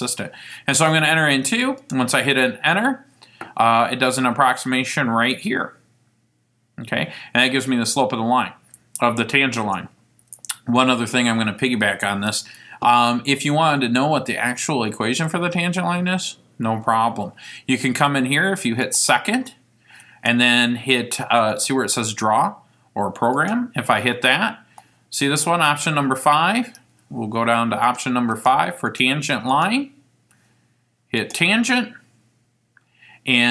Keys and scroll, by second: 1.9 Return, 24.8 *, 28.0 Down, 28.5 Down, 29.0 Down, 29.6 Down, 31.3 Return.